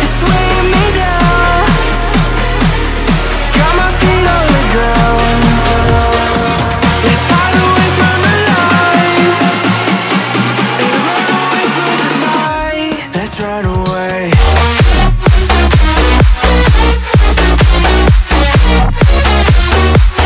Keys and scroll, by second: 0.9 space, 4.5-7.2 typing, 9.8 Return.